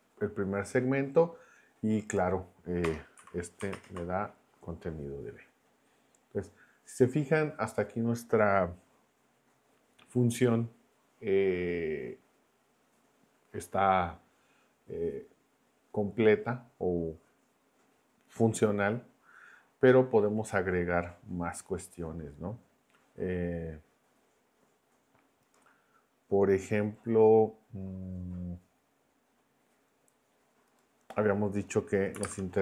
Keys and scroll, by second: 2.8 BackSpace, 3.2 b, 3.7 ctrl+Return, 32.1-32.6 typing.